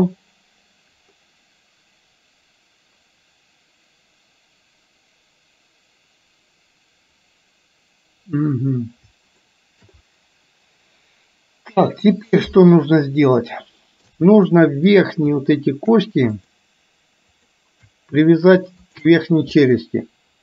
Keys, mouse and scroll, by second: 9.6 shift+middle click, 13.2 middle click, 15.1 click, 16.5 shift+click, 17.5 shift+click, 18.8 shift+click.